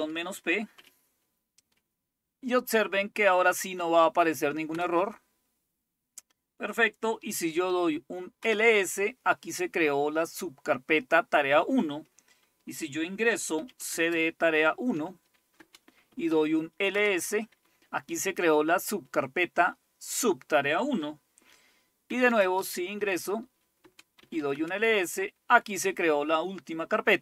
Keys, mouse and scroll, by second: 0.0-0.8 typing, 4.7 Return, 7.5-8.6 typing, 8.4 Return, 13.4-16.9 typing, 21.9-24.9 typing.